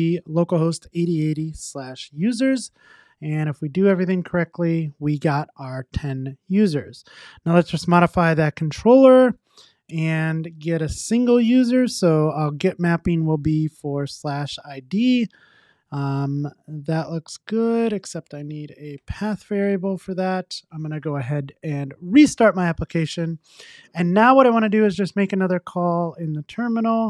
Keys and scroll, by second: 12.4 Return, 13.6 Tab, 20.1 super+s, 22.2 ctrl+r.